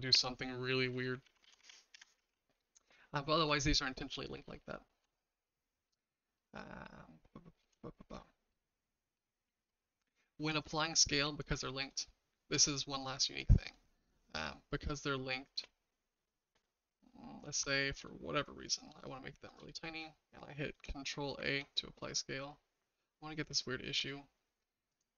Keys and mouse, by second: 1.2 ctrl+z, 1.4 ctrl+z, 1.6 ctrl+z, 1.9 ctrl+z, 2.1 ctrl+z, 2.3 ctrl+z, 4.5-5.0 shift+middle drag, 5.9 middle drag, 6.4-7.6 shift+middle drag, 7.8 middle drag, 8.5-9.1 middle drag, 12.1-12.7 shift+middle drag, 15.5 s, 21.4 ctrl+a, 25.0-25.1 drag.